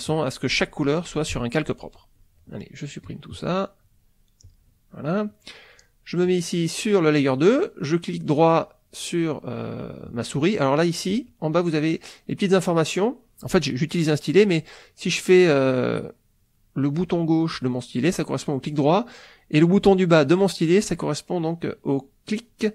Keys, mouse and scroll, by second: 2.2 click, 3.1 click, 4.4 click, 6.2 click, 8.5 right click, 11.2 click, 17.2 right click, 18.1 right click, 20.1-21.1 middle drag, 22.4-22.7 drag.